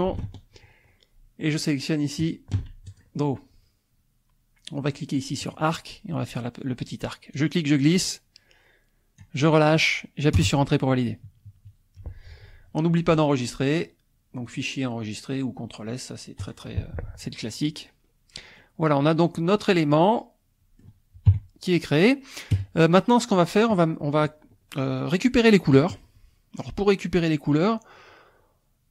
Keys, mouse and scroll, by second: 0.3 ctrl+Tab, 2.2 ctrl+click, 2.8 ctrl+click, 5.4 click, 7.3-9.4 drag, 10.4 Return, 11.3 KP_Subtract, 14.5 click, 17.9-18.2 scroll up 1, 18.6-20.8 middle drag, 20.8 scroll up 1, 21.3 KP_1, 22.0 scroll up 1, 22.5 KP_0, 23.9-28.9 scroll down 1.